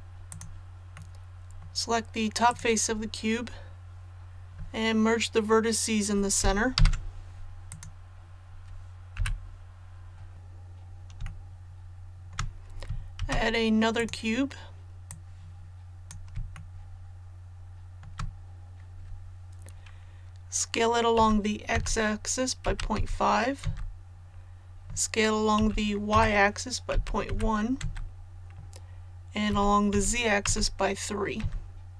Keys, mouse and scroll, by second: 0.2 click, 0.9 middle click, 2.4 right click, 6.7 alt+m, 7.6 click, 11.2-12.3 shift+middle drag, 13.1 shift+a, 13.9-16.3 drag, 16.5 shift+middle click, 21.1-22.9 typing, 25.5-27.2 typing, 29.4-30.4 typing.